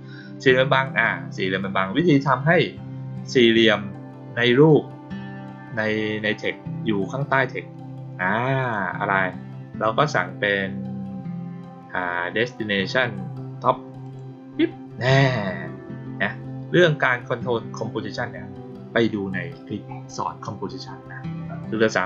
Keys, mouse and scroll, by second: 3.4 click, 8.5 click, 14.0 click.